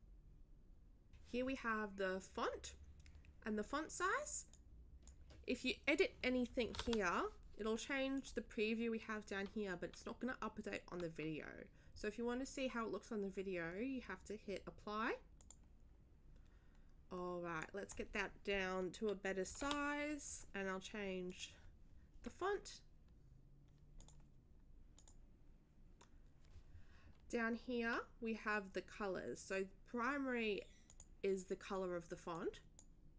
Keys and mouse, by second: 4.5 click, 6.6 1, 8.1 click, 8.4 click, 15.4 click, 17.6 click, 21.3 click, 24.0 click, 25.0 click, 30.9 click, 32.3 click.